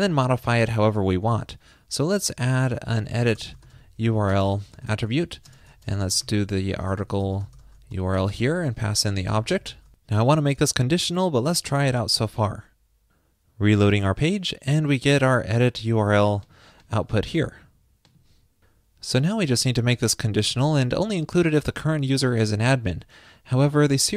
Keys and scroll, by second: 5.3 super+Right, 12.2 super+s.